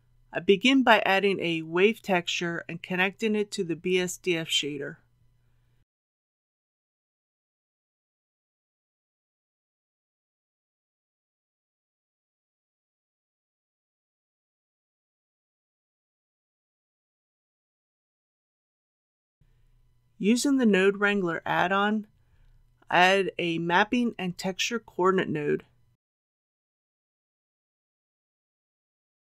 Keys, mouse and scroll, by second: 4.1 shift+a, 7.5-12.1 drag, 13.1 shift+middle click, 13.8 scroll up 1, 14.4 middle click, 15.5 shift+middle click, 20.8 click, 23.6 shift+t, 24.8 click, 26.6 ctrl+t.